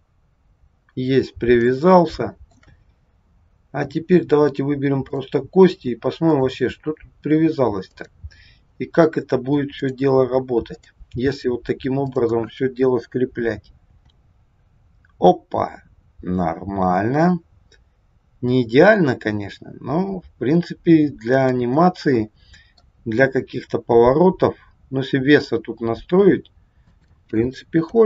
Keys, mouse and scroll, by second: 1.1-1.5 scroll down 2, 1.6 shift+middle click, 5.0 click, 6.2 click, 7.9 click, 9.7 click, 12.1 click, 14.0 r, 21.9 middle click, 23.2 r.